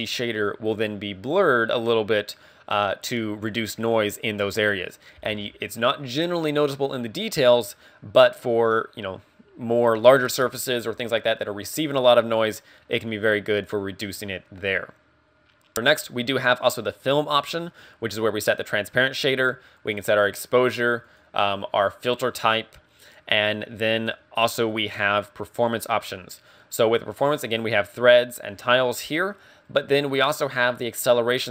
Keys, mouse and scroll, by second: 20.9 click, 24.4 click.